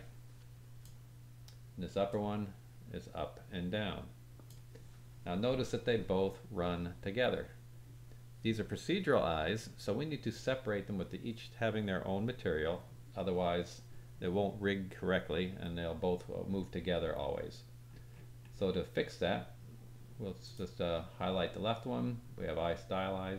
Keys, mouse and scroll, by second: 2.0-4.4 drag, 17.2-17.8 scroll up 2, 17.8 scroll up 1, 18.4-20.4 scroll up 1, 20.4 click.